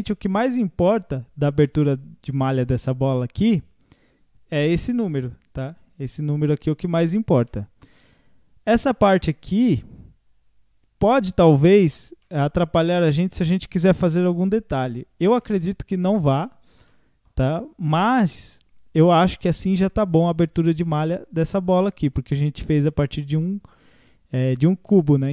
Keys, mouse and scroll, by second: 0.3-8.5 middle drag, 8.5 scroll up 2, 8.8 middle click, 9.5 scroll up 1, 12.2-14.9 middle drag, 14.9-15.4 scroll down 2, 15.4-16.7 middle drag, 16.7 scroll up 1, 16.9-20.3 middle drag, 20.3 scroll down 2, 20.9-23.9 middle drag, 24.4-24.9 scroll up 1, 24.9 middle click.